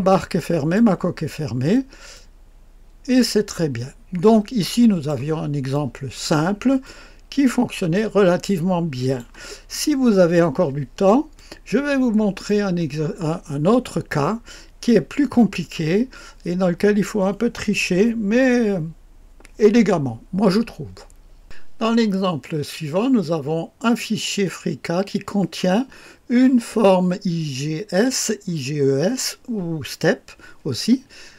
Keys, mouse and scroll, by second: 1.2-2.1 scroll down 1, 2.1-5.1 drag, 5.7-6.8 middle drag, 6.8-9.2 drag, 11.3-13.4 drag, 21.4 click.